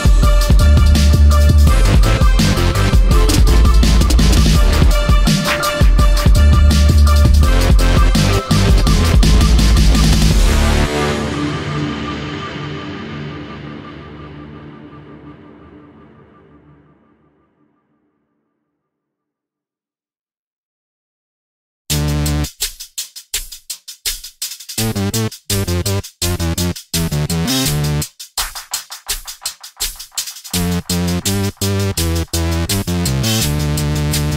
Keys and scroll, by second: 6.0 ctrl+z, 32.2 space.